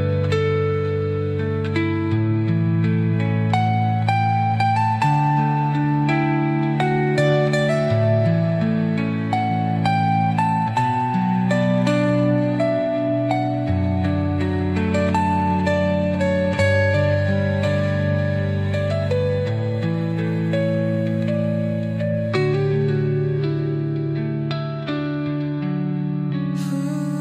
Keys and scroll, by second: 12.2 ctrl+z, 25.5 space.